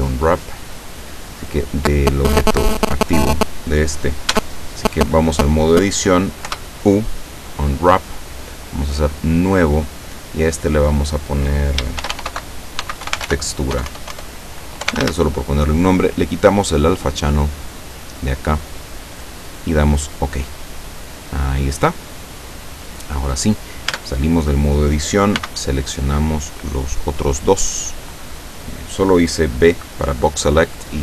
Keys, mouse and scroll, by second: 0.3 click, 3.3 right click, 4.4 Tab, 6.5 u, 7.3 click, 9.3 click, 10.2 click, 12.0-15.6 typing, 17.4 click, 17.9 click, 20.1 click, 21.1-21.5 scroll down 1, 21.7 scroll up 1, 24.0 Tab, 25.4 b, 25.9-26.6 drag, 27.2-29.0 middle drag.